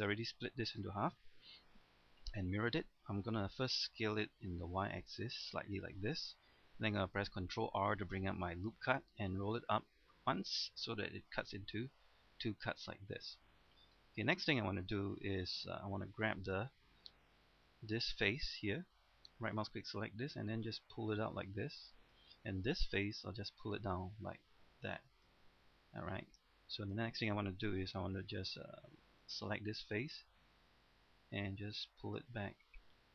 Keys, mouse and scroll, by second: 0.5-0.8 scroll down 1, 1.3 middle click, 4.2-4.7 typing, 5.8 click, 7.5 ctrl+r, 9.4 scroll up 1, 11.2 middle click, 12.4-12.7 scroll up 1, 12.7 middle click, 14.0-16.6 middle drag, 17.6 right click, 18.6-20.2 middle drag, 20.4-22.2 drag, 22.7 right click, 23.4-25.6 drag, 25.6 middle click, 28.4 right click, 29.4 middle click, 30.8-32.3 drag, 32.9 middle click.